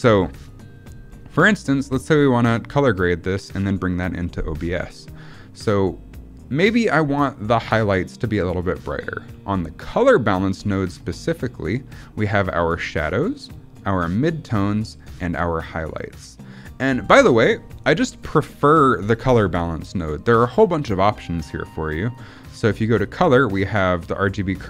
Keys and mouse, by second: 1.4 middle click, 20.2 middle click, 22.0-24.6 drag.